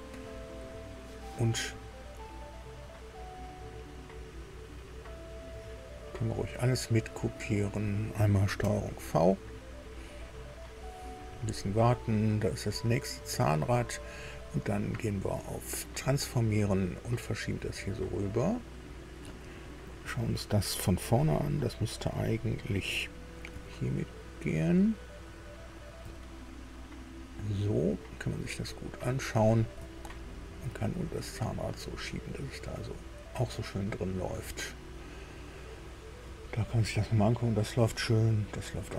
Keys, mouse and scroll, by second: 6.0 click, 7.5 scroll down 1, 8.6 ctrl+v, 11.2-11.6 scroll down 1, 12.6 click, 13.6 right click, 15.9 click, 17.4-19.1 drag, 23.5 KP_3, 26.0 KP_6, 28.4 scroll up 2, 29.9 shift+click, 31.4-33.7 drag, 34.1 scroll down 2, 36.5-36.9 scroll up 2, 37.4 scroll down 2, 38.6 click.